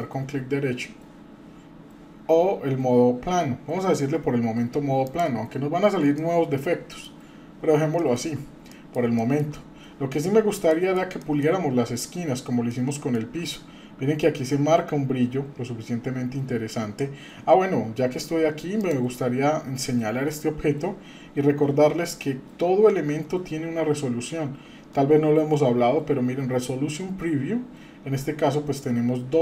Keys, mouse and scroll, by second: 5.7-6.1 scroll up 1, 6.2 middle click, 7.1-7.8 scroll down 3, 8.0 shift+middle click, 8.7 middle drag, 9.1-9.5 shift+middle drag, 9.6-10.3 scroll up 4, 10.7-11.4 shift+middle drag, 12.0-12.3 scroll up 1, 12.7-13.4 shift+middle drag, 13.4 scroll up 2, 18.8 click, 23.5-26.5 scroll up 4.